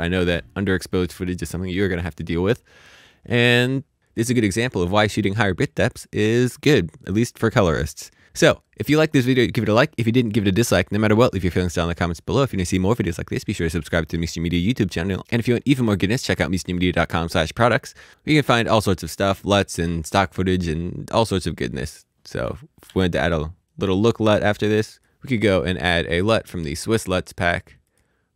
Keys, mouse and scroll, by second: 21.9 space, 22.7 click, 22.8 alt+s, 23.6 right click, 25.0 click, 27.8 click.